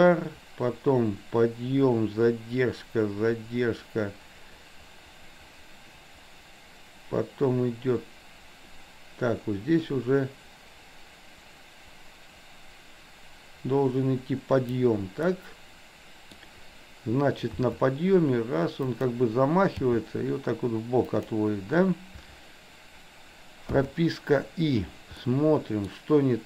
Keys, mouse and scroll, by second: 15.3-16.4 middle drag, 17.7 r, 19.8 g, 23.8 i, 25.3-25.9 middle drag.